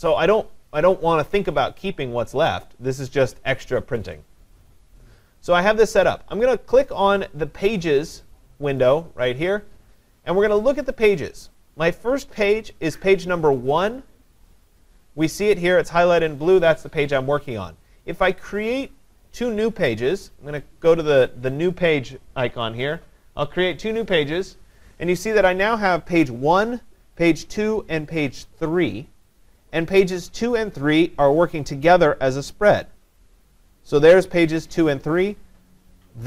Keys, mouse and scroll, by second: 8.8-13.9 drag, 23.0 click, 26.3 click, 27.4 click.